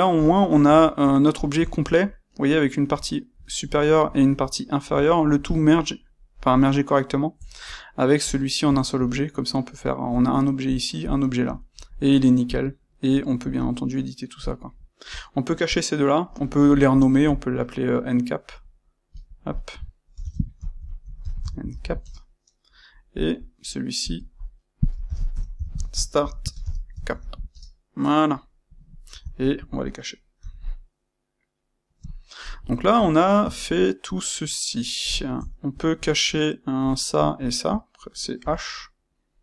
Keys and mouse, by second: 0.1 click, 0.4-8.2 middle drag, 8.2 click, 8.6-10.0 shift+middle drag, 10.0 click, 10.6 click, 11.0 click, 11.4-12.4 shift+middle drag, 12.4 click, 12.7-14.3 middle drag, 14.3 shift+click, 14.6-16.8 shift+middle drag, 16.8 click, 17.8-19.0 middle drag, 19.0 click, 19.2-23.1 drag, 22.0 Return, 24.0-28.6 drag, 27.5 Return, 28.6-29.3 middle drag, 29.3 shift+click, 30.3 h, 32.4-36.8 middle drag, 36.8 click, 38.3 h, 38.7-39.4 middle drag.